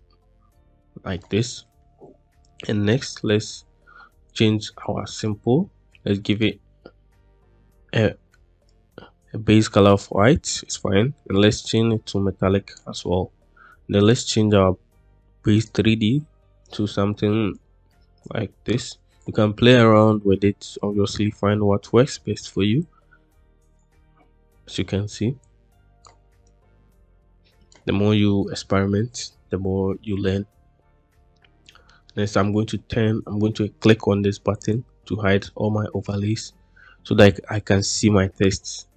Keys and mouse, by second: 3.4 middle drag, 4.2 click, 6.3 click, 11.8 click, 13.9 click, 15.5 click, 16.5 click, 21.1 middle click, 22.7-23.7 drag, 25.3 click, 26.5-27.6 drag, 34.4 click.